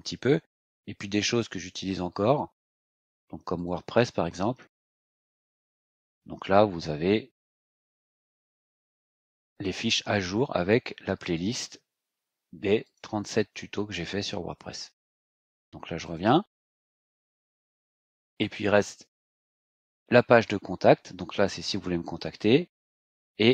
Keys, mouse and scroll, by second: 0.3 scroll up 2, 1.1-1.4 scroll up 2, 3.5 click, 6.0-7.7 scroll down 4, 8.0 scroll down 2, 9.2-10.1 scroll down 4, 10.8 scroll down 2, 12.8 click, 13.8-14.3 scroll down 2, 14.9 click, 16.0 click, 17.2 scroll up 2, 18.3 click.